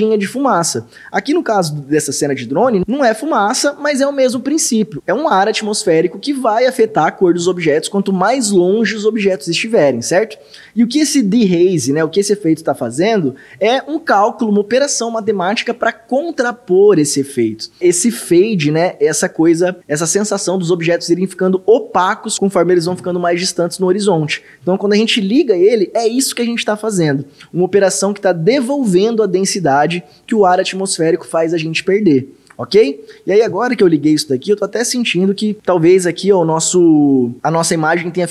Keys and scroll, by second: 25.1 ctrl+d.